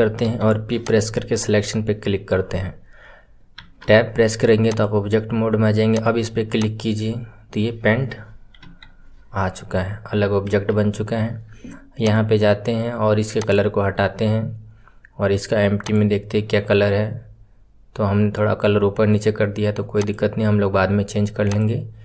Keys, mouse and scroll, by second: 4.6 click, 5.9 click, 6.5 click, 12.0 click, 13.3-15.9 drag, 19.9 click, 21.4-22.0 drag.